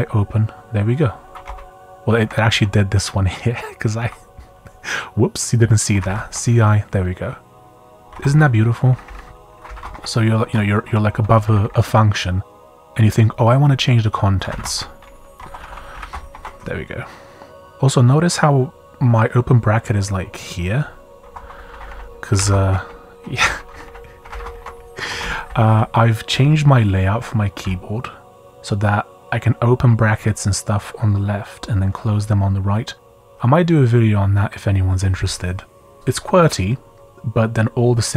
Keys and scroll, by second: 0.0-0.2 typing, 1.3 Escape, 1.4 u, 2.2 Down, 2.5 Up, 4.0 Down, 5.7-6.7 typing, 7.9-11.1 typing, 8.9 Up, 9.0 Up, 11.4 Up, 11.6 Up, 14.1-16.8 typing, 21.2 Escape, 21.3-25.2 typing, 21.7 Up, 21.9 Up, 23.4 Escape, 23.7 Up, 23.8 Up, 25.1 Escape, 25.4 Up, 25.7 Page_Up.